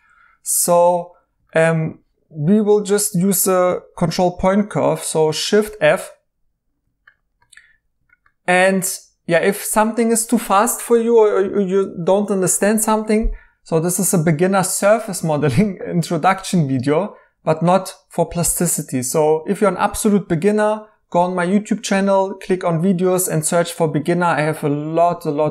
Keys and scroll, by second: 6.0 f.